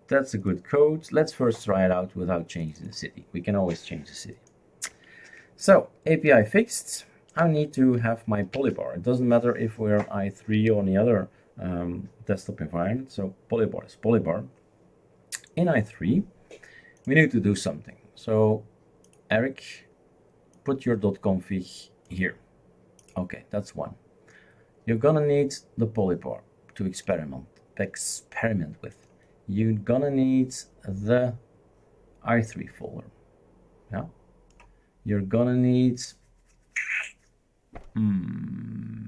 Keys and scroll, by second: 7.4 shift+super+q, 8.5 shift+super+q.